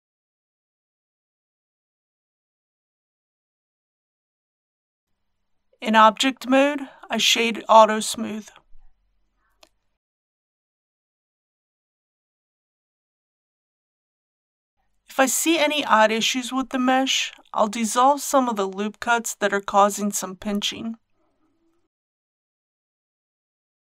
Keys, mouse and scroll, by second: 2.2 z, 2.7 click, 3.8 z, 4.9 click, 5.2 Tab, 7.6 right click, 9.3-10.3 drag, 10.4-14.3 middle drag, 20.3 Tab, 23.6 2.